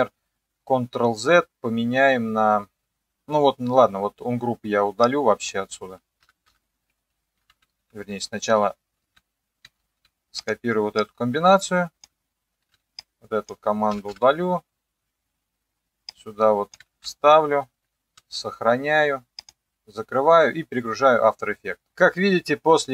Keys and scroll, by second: 6.2 Delete, 6.5 Delete, 7.8 ctrl+x, 9.0 ctrl+z, 9.8 ctrl+z, 12.6 ctrl+x, 13.9 Delete, 14.1 Delete, 17.0 ctrl+v, 18.2 ctrl+s.